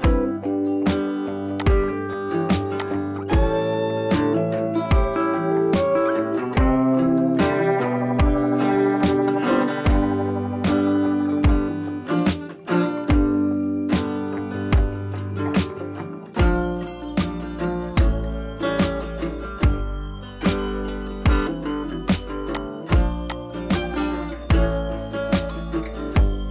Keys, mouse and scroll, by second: 1.5 click, 2.2 scroll up 1, 2.7 click, 3.1-3.4 space, 3.4 scroll down 1, 8.9 click, 13.3-13.8 scroll up 1, 13.8-17.7 drag, 21.5-26.5 drag.